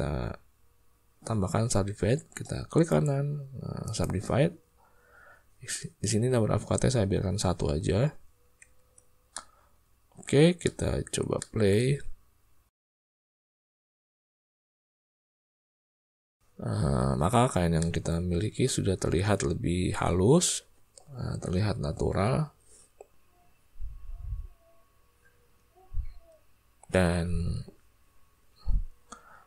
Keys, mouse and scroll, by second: 2.9 click, 3.3-5.8 right drag, 8.8 Tab, 9.3 click, 9.6 middle click, 10.6 ctrl+click, 11.3 shift+click, 11.9 space, 17.3 middle click.